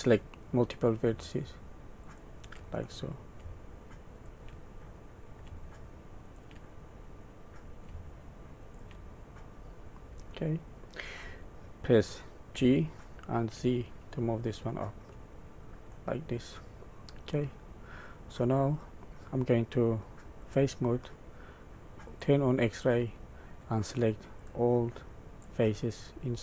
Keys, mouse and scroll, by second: 0.0 shift+middle click, 0.4 middle click, 2.0 shift+click, 2.8 middle click, 4.1 shift+click, 4.9 middle click, 6.2 shift+click, 6.8 middle click, 8.6 shift+click, 9.2 middle click, 12.5 g, 15.9 middle click, 17.4 middle click, 20.4 click, 22.0 click, 22.9 middle click, 24.4 click.